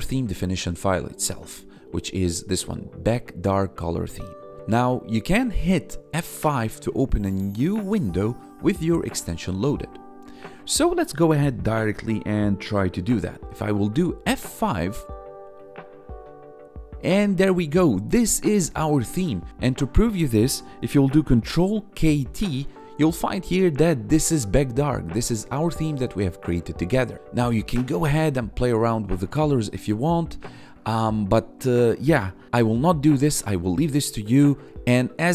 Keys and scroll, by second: 13.4 F5, 21.4 ctrl+k, 21.7 ctrl+t, 22.1 ctrl+k, 23.9 1.